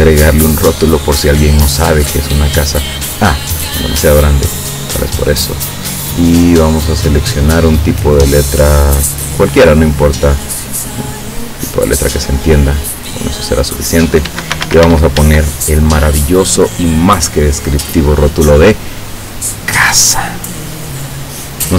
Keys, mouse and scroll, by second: 3.2 click, 4.7 click, 5.7 click, 9.4-9.8 scroll up 2, 11.1 click, 11.8-13.3 drag, 14.3 Caps_Lock, 14.3-15.4 typing.